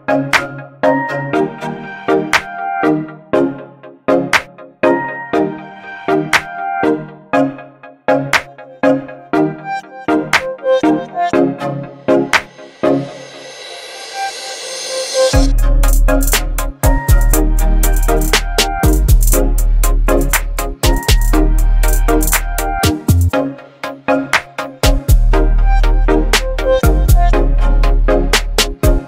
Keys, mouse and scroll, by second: 5.7 ctrl+click, 7.5 ctrl+t, 9.2-11.1 drag, 14.2 click, 18.5 right click, 19.1 click, 25.2-29.0 click.